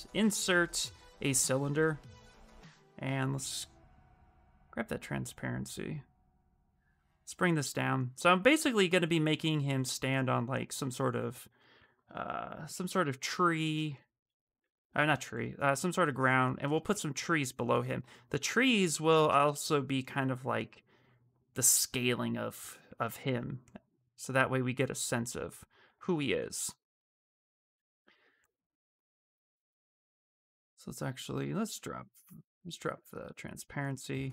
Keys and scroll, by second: 1.4 w, 13.4 shift+f.